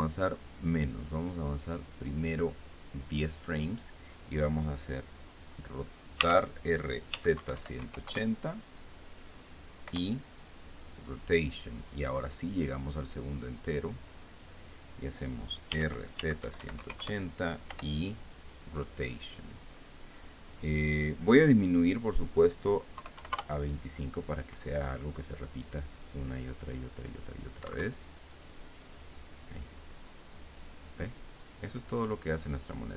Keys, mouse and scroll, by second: 1.9 click, 6.8-8.4 typing, 8.7 KP_Enter, 10.5 i, 11.7 click, 13.5-14.9 drag, 16.3-18.3 typing, 17.6 KP_Enter, 19.3 click, 22.4 click, 23.6 KP_2, 23.8 KP_5, 24.0 KP_Enter, 26.7 click, 28.3 Escape, 29.0 click, 29.4 click, 31.0 click.